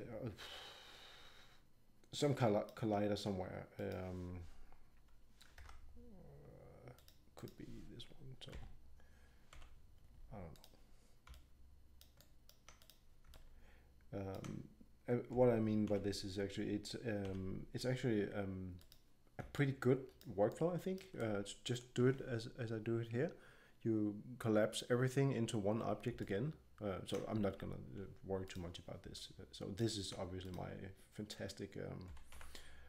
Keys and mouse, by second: 3.7-5.3 drag, 5.6 ctrl+Tab, 8.5 g, 9.4 middle click, 11.4 click, 11.4 middle click, 11.5 click, 11.6 middle click, 11.7 click, 11.8 click, 12.0 middle click, 12.0 click, 13.9-15.1 drag, 15.3 g, 19.5-21.4 drag, 20.5 right click, 21.2-25.2 middle drag, 26.2-28.4 middle drag, 32.0 g.